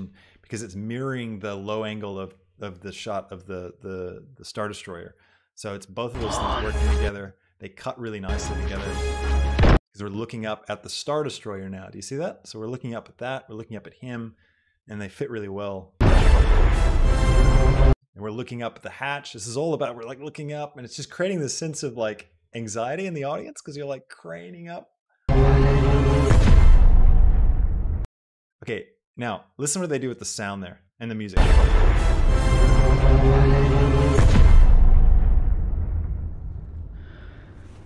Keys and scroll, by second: 6.2 space, 9.8 space, 17.9 space, 25.2 space, 28.2 space, 31.5 space.